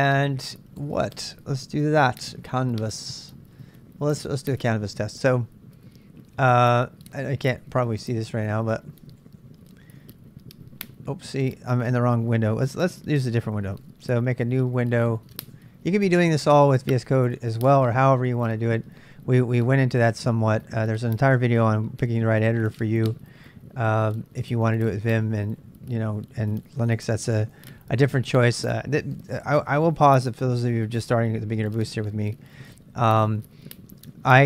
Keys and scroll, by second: 1.8-4.1 typing, 4.6 super+Tab, 7.3-9.9 typing, 12.2-15.9 typing.